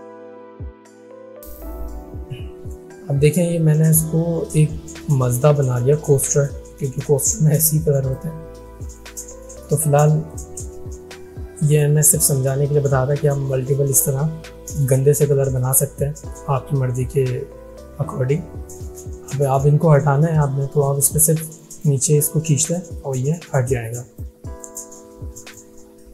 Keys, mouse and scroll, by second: 5.7-8.2 drag, 20.7 click.